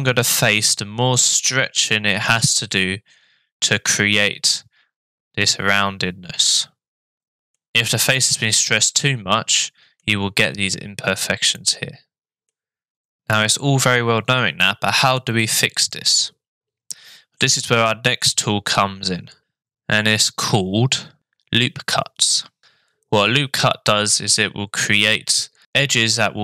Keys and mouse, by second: 7.2 middle click, 9.6 middle click, 11.5 middle click.